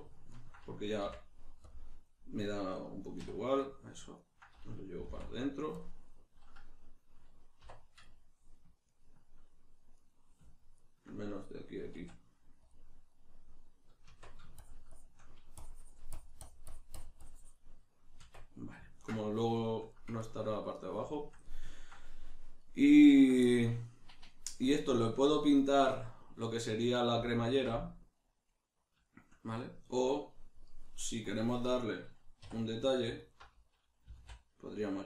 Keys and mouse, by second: 0.3 ctrl+right click, 1.0 x, 3.6 right click, 4.1 ctrl+right click, 5.0 g, 5.8 click, 7.6 1, 8.0 right click, 8.8 ctrl+right click, 9.9 right click, 10.7 ctrl+right click, 12.0 q, 13.1-14.6 middle drag, 14.0 Tab, 14.6-17.9 shift+drag, 17.9-31.3 middle drag, 18.2 Tab, 31.3-32.4 drag, 32.4 2, 33.2 alt+right click, 34.1 g.